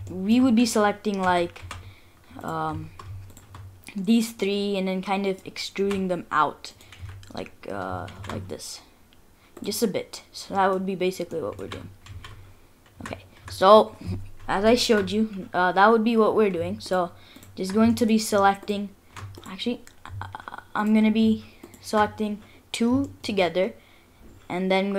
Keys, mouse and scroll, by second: 0.0 scroll down 3, 0.1 shift+middle click, 0.5-1.2 scroll up 3, 1.2 2, 1.6 3, 2.4 alt+click, 3.3 alt+shift+click, 3.7-4.1 scroll down 3, 4.4 middle click, 5.8 e, 7.0 s, 9.8 middle click, 10.7 scroll up 1, 11.0 scroll down 4, 11.3 middle click, 11.6 ctrl+z, 12.1 ctrl+z, 12.4-12.9 scroll up 4, 13.0 Tab, 13.2-13.7 scroll down 2, 13.4 Tab, 13.7-14.3 scroll up 2, 14.4 scroll down 1, 14.7 shift+middle click, 15.0-15.5 scroll up 1, 15.5-16.0 scroll up 1, 16.9 alt+shift+click, 17.4 alt+shift+click, 17.9 shift+middle click, 18.6 alt+shift+click, 19.4 click, 20.8 alt+click, 21.6 alt+click, 23.0 shift+middle click, 23.8-24.1 scroll down 1, 24.3 scroll up 1.